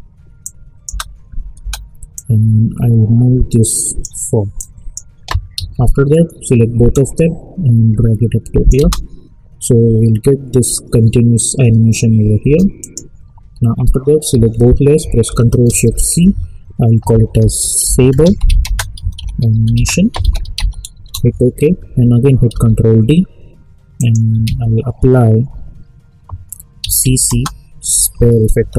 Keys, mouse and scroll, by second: 0.4 click, 0.8 space, 2.1-5.5 drag, 5.5 ctrl+a, 6.9-8.7 drag, 8.7 space, 12.4 space, 12.8 click, 14.3 ctrl+a, 15.9 ctrl+shift+c, 17.1-21.0 typing, 22.5 ctrl+d, 23.9 click, 24.4 ctrl+a, 26.8-28.7 typing.